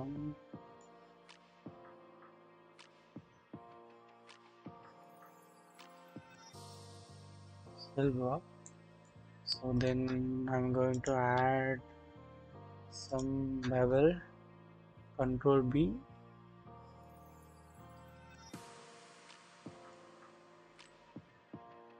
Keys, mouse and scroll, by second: 1.6-4.3 drag, 4.3-6.5 middle drag, 8.6 middle click, 9.4 shift+middle click, 10.9 alt+click, 11.7-12.4 scroll up 1, 13.0 alt+shift+click, 14.8 ctrl+b, 14.9 ctrl+b, 20.1-20.7 scroll down 1, 20.7 click, 21.1-21.5 scroll up 1, 21.5-21.9 scroll down 1.